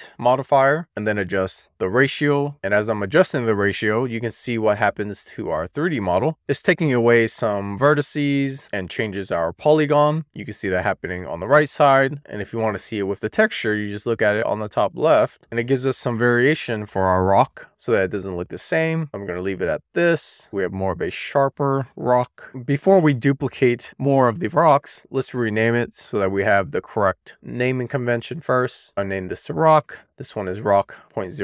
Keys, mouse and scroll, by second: 0.0 drag, 2.0-4.9 drag, 5.5-5.9 scroll down 1, 6.0 shift+middle click, 7.1 middle click, 8.1 middle click, 10.3 click, 10.8-13.2 middle drag, 13.2-14.0 shift+middle drag, 14.0-15.1 middle drag, 15.2 middle click, 15.9 middle click, 16.4 drag, 17.3 shift+d, 18.3 click, 18.5 middle click, 18.9 shift+middle click, 20.2 super+z, 20.5 middle click, 25.3 click, 25.7-30.0 drag, 30.2-31.4 shift+drag.